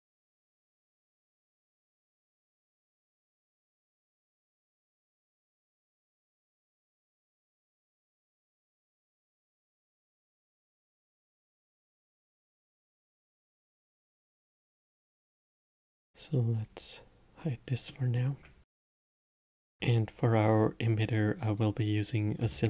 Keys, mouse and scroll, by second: 0.0-3.0 middle drag, 6.3 click, 7.7 click, 10.2 click, 13.0-16.1 drag, 16.9 click, 18.2-19.3 middle drag, 21.9 shift+a.